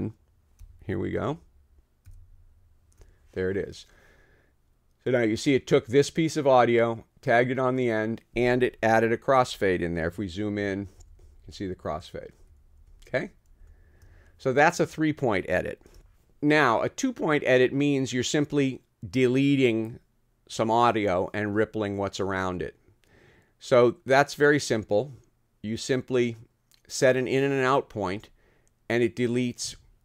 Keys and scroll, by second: 12.4 -, 12.8 -, 13.6 space, 16.1 super+z.